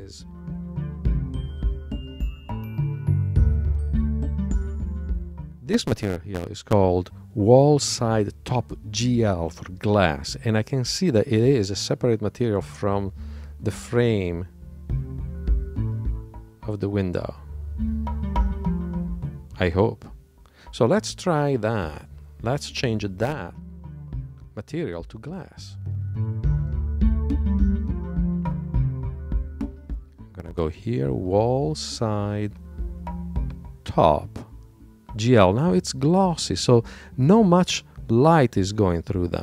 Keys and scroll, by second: 0.2 ↺, 3.5 alt+shift+a, 28.6 shift+super+l.